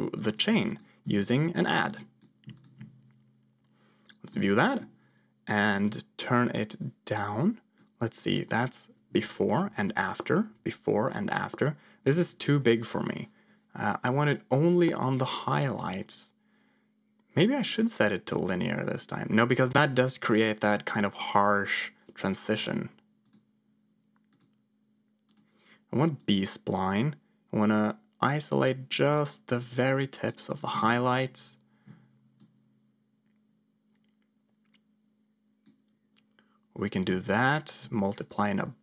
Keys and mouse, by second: 0.7 click, 1.6 click, 2.5 ctrl+shift+click, 4.3 middle click, 5.9-7.8 drag, 9.0 m, 9.6 m, 10.4 m, 10.9 m, 13.4-15.1 drag, 15.7-17.7 drag, 18.9-22.0 drag, 22.4-23.4 drag, 24.2-25.3 drag, 26.1-30.3 drag, 30.8 ctrl+shift+click, 32.3-35.5 drag, 37.2 ctrl+shift+click, 38.3 click.